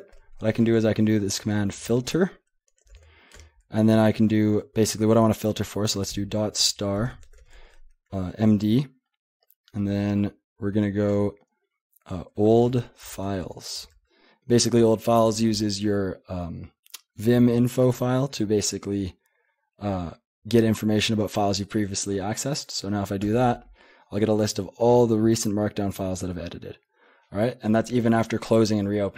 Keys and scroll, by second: 0.5 :, 1.8-3.4 typing, 4.8 typing, 5.9-8.9 typing, 10.0 typing, 11.1-14.2 typing, 23.2 Return.